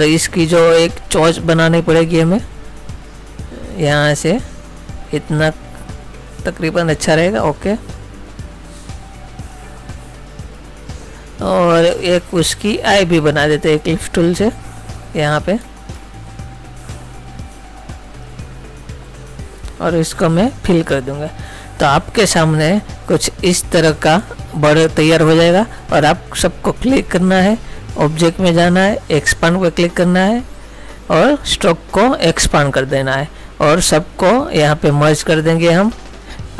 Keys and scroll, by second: 24.3 ctrl+-.